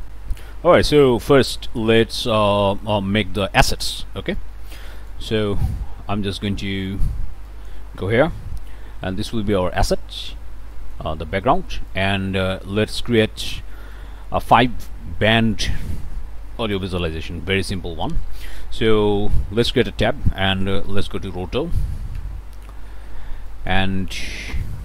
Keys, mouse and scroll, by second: 0.1 click, 0.9 scroll up 1, 1.0 click, 1.6 scroll up 1, 2.0 click, 3.8 click, 4.4 click, 7.5 click, 8.4 1, 10.7 click, 11.4 click, 11.9 click, 12.4 click, 17.8 click, 18.5 click, 19.7 Tab, 21.6 Down, 22.2 Return, 23.5 click, 24.2 click, 24.4 scroll up 2, 24.6-24.8 scroll down 2.